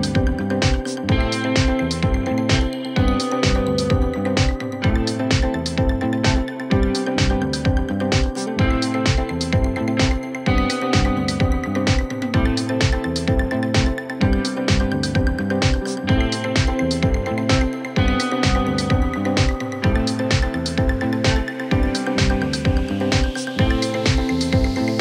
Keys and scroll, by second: 13.5-15.1 typing, 19.1 Return, 19.2-20.9 typing.